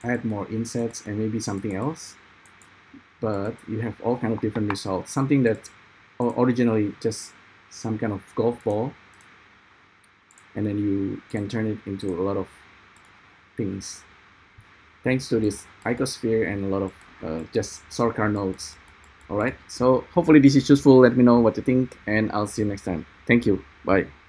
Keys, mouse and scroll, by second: 9.4 ctrl+`, 9.4 ctrl+3.